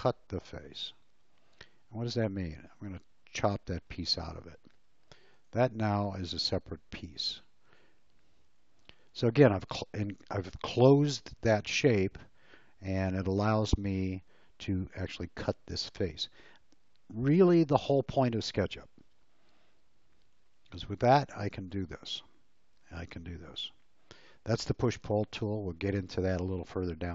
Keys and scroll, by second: 3.8 space, 20.5 p.